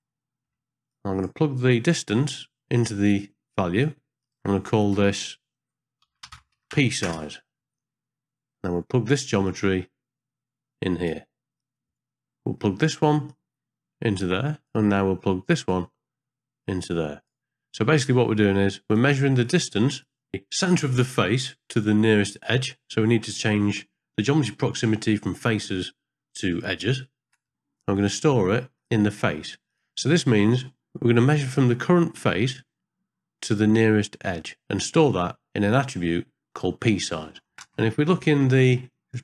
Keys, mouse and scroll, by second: 0.0 middle click, 0.9-1.3 drag, 2.2-3.8 drag, 4.2-7.0 drag, 9.4-11.1 drag, 11.6 click, 11.9 click, 12.0 click, 13.3-14.6 drag, 15.6 click, 15.7-17.3 drag, 18.0-19.0 drag, 19.4 click, 23.1-23.6 drag, 25.7-26.9 drag, 28.7-29.7 drag, 37.7 ctrl+space.